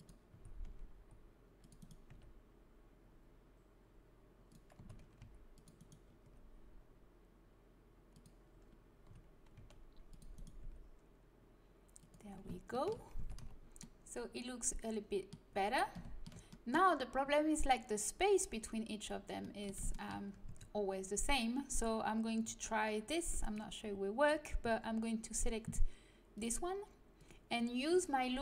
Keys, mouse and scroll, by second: 0.2 a, 0.9 c, 2.0 g, 4.7 a, 5.1 c, 6.1-7.6 middle drag, 6.2 g, 9.1 a, 9.5 c, 10.6 g, 12.8 middle click, 13.1 Tab, 13.3 z, 20.4 Tab, 23.2 click, 23.3 right click, 23.7 click, 23.9-25.7 right drag, 26.3-28.4 drag.